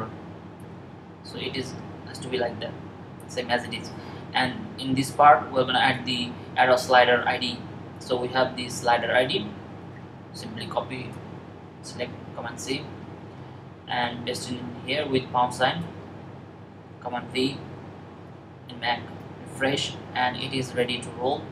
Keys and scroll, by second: 11.8 super+c, 16.8 super+v.